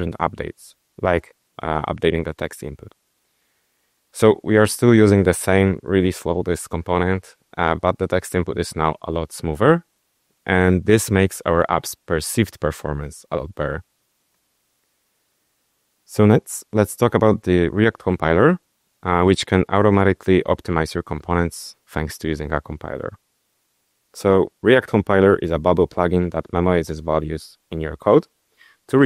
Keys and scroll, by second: 0.0-1.3 typing.